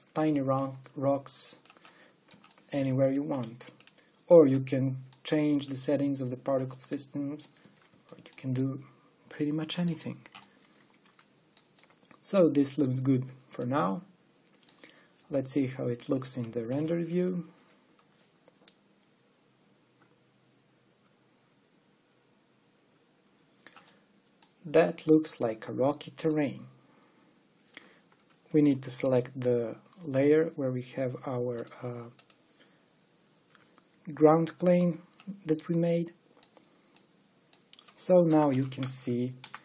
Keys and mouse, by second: 1.4-2.4 drag, 2.6 click, 2.7 click, 4.7 middle click, 7.6 middle click, 7.8 click, 7.9 middle click, 8.0 click, 8.2 middle click, 8.3 a, 9.1 click, 9.5 click, 17.0-24.6 drag, 24.6-26.3 middle drag, 26.5 middle click, 28.6 middle click, 30.2-31.4 drag, 31.7 click, 32.6-34.5 drag, 35.4 click, 39.0 KP_7, 39.5 KP_5.